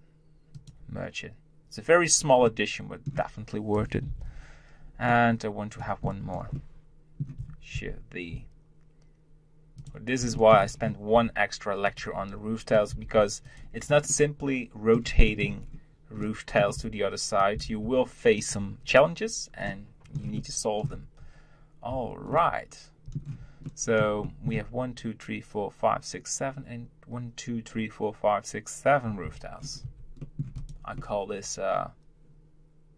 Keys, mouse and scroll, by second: 2.5-4.1 middle drag, 4.1 ctrl+l, 5.1-7.8 middle drag, 7.8 shift+d, 10.3 shift+middle click, 10.7 scroll up 1, 11.1 r, 13.7-14.1 scroll down 1, 14.1-15.6 middle drag, 15.6-16.2 scroll up 1, 16.2 middle click, 16.8 r, 19.4 scroll down 1, 19.6 middle click, 20.1-22.1 middle drag, 22.1 Tab, 22.3-27.3 middle drag, 29.2 Tab, 29.6-29.9 scroll down 4, 29.9 Tab, 30.2-30.6 middle drag, 30.6 click, 31.0-32.9 middle drag.